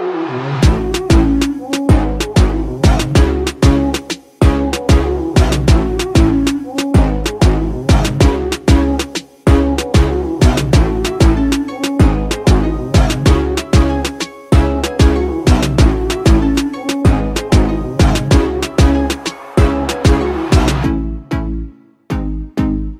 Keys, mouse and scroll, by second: 11.5-12.2 typing, 11.7-13.9 drag.